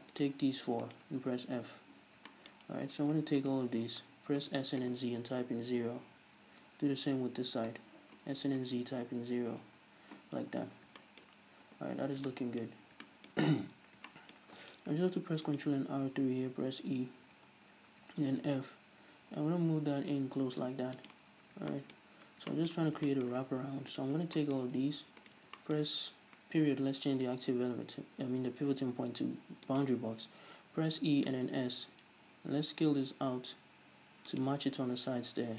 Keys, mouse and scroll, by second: 0.2-1.0 shift+right drag, 1.7 f, 1.9-3.4 middle drag, 1.9-2.4 scroll up 2, 3.4 alt+right click, 4.4 s, 7.4 Return, 7.7 alt+right click, 8.3 s, 9.9 Return, 10.5 scroll up 1, 11.1-21.5 shift+middle drag, 12.0-12.3 scroll down 1, 13.8 scroll up 1, 15.0 ctrl+r, 21.5 scroll up 1, 21.8-24.0 shift+middle drag, 22.2 scroll up 1, 24.0 right click, 24.2 scroll down 1, 24.4-25.3 shift+middle drag, 25.3 ctrl+right click, 25.6-34.5 shift+middle drag, 26.7 ., 30.8 e, 34.5 shift+click.